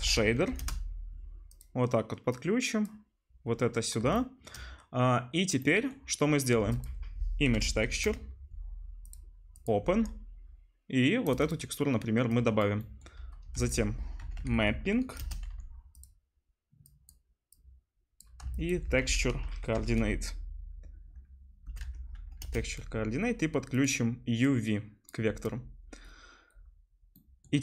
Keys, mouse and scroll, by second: 2.3-9.1 middle drag, 4.2 shift+click, 4.2 shift+right click, 6.6 shift+a, 9.6-11.4 middle drag, 13.5 shift+a, 14.6 p, 16.0 click, 18.4 shift+a, 23.9 click, 25.1-27.6 middle drag, 26.3-27.6 drag, 26.3-27.6 right drag.